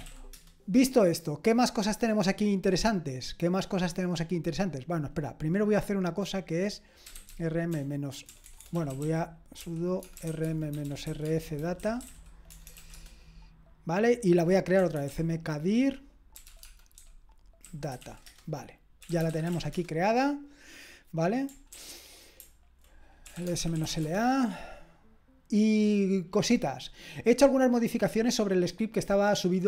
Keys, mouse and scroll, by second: 0.0-0.5 typing, 6.9-12.9 typing, 14.5-20.2 typing, 21.7 ctrl+ñ, 21.7 ctrl+l, 23.0-24.4 typing.